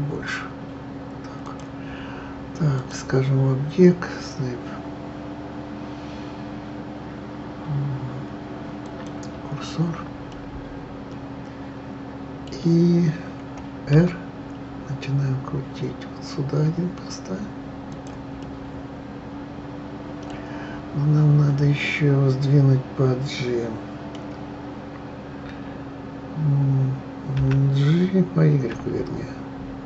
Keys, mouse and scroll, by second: 2.8-5.8 drag, 10.3-13.3 middle drag, 13.9 r, 18.4-21.4 middle drag, 27.4 g.